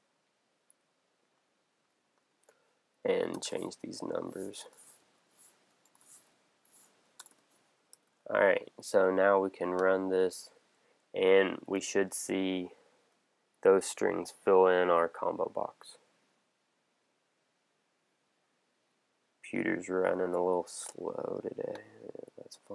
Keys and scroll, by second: 3.8 Down, 8.0 super+s.